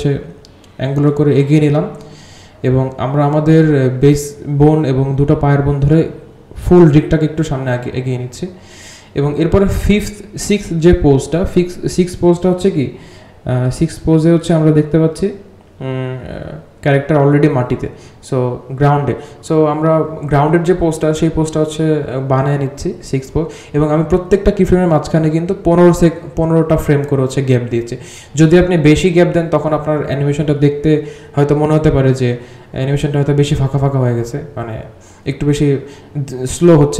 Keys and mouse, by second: 0.0-2.6 drag, 10.6 g, 13.0 g, 13.6 r, 14.1 g, 14.9 r, 15.5 click, 16.5 g, 17.0 r, 17.7 g, 18.1 r, 18.6 click, 19.1 g, 19.7 r, 20.2 g, 21.8 g, 24.3 g, 26.5-26.9 drag, 27.7 g, 29.4 g, 30.4 click, 30.7 g, 31.8 g, 34.2 click, 35.7 click, 36.6 space.